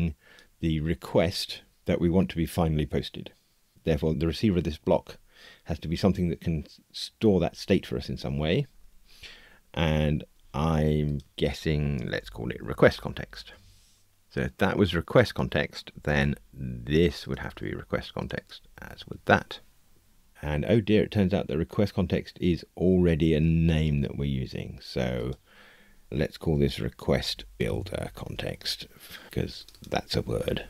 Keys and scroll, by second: 14.2 Escape, 30.3 super+c.